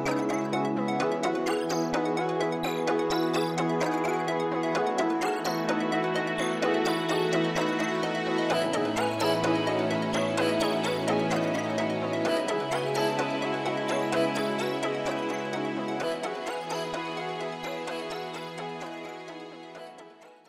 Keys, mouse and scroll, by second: 0.9 scroll down 1, 1.3 scroll up 1, 1.6 middle click, 5.9 middle click, 6.1 scroll up 1, 12.3 middle click, 12.3 scroll up 1, 17.5 scroll up 1, 17.5 middle click.